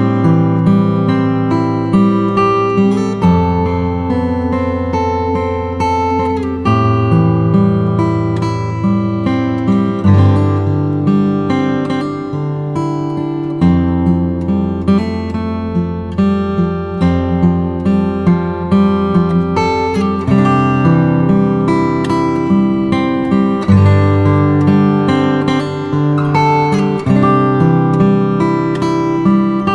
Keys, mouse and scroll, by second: 0.5-2.7 typing, 1.6 click, 2.8 click, 3.9 [, 5.2 click, 6.5-8.1 typing, 8.3 click, 10.8 click, 12.8 ctrl+alt+shift+e, 13.3 ctrl+shift+a, 18.1 click, 18.5 space, 18.6 click, 19.5 g, 20.3 click, 25.5 typing, 26.6 click, 29.1 typing.